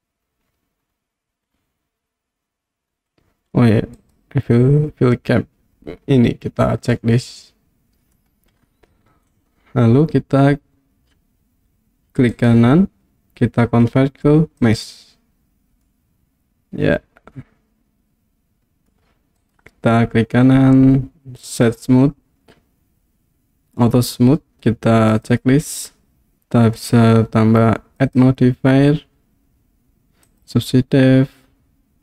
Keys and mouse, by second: 4.0 click, 7.0-8.2 middle drag, 12.5-14.8 right drag, 15.9-18.9 middle drag, 19.6-21.7 right drag, 25.1 click, 26.8 click, 28.2-30.4 drag.